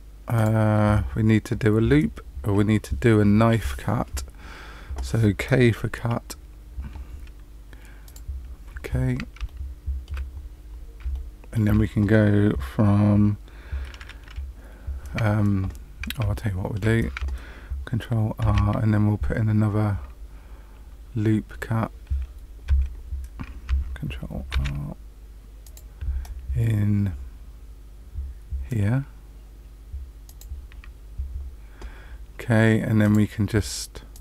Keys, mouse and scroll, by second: 0.3 click, 8.0 click, 8.8-9.4 scroll up 2, 9.4 shift+middle click, 10.3-10.7 scroll up 4, 11.1 shift+middle click, 16.3 shift+middle click, 18.4 ctrl+r, 20.3-20.8 scroll down 3, 22.6 Escape, 24.5 ctrl+r, 33.0 click, 34.1 click.